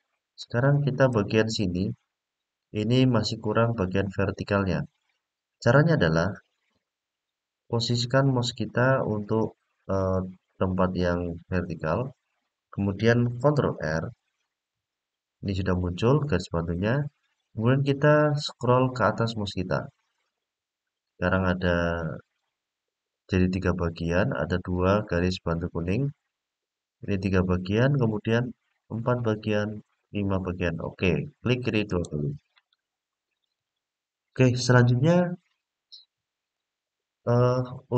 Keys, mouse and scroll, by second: 14.1 ctrl+r, 32.3 click, 33.3 click, 36.3-37.9 middle drag.